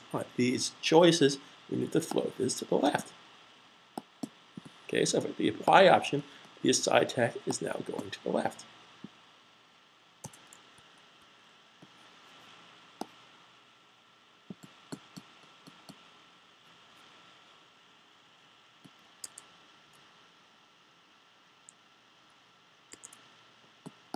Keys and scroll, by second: 9.5-9.9 typing, 12.5 typing.